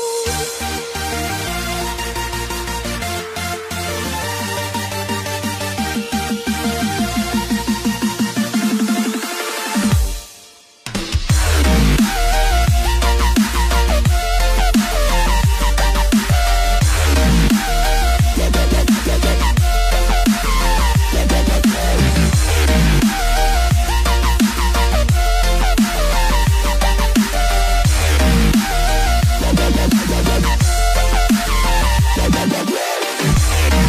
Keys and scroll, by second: 5.6 space.